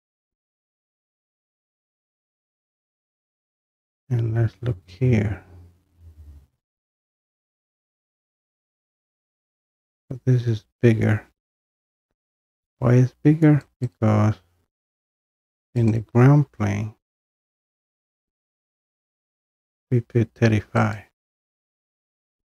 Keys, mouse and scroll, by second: 0.2 click, 2.7-4.1 drag, 4.1-6.3 scroll up 2, 6.3 scroll up 1, 6.4-6.8 scroll down 1, 6.8-11.8 middle drag, 11.8-12.1 scroll up 4, 12.1-13.5 scroll down 2, 13.5 scroll down 1, 13.8-16.6 drag, 18.1 click, 18.2 click, 21.0 click.